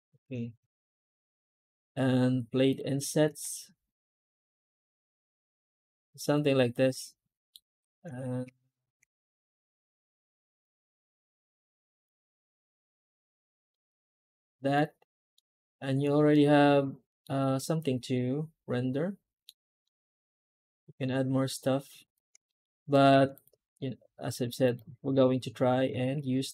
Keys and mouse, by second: 0.1 Tab, 0.5 a, 0.7 Tab, 6.1-7.4 middle drag, 7.7 click, 7.9 Tab, 8.3 a, 8.9 Tab, 12.8 typing, 13.6 middle drag, 14.6-15.2 middle drag, 16.2-17.1 middle drag, 17.3 shift+middle drag, 18.0-19.3 middle drag, 19.7-20.9 middle drag, 22.0 drag, 22.3 shift+middle drag, 23.6-24.2 middle drag.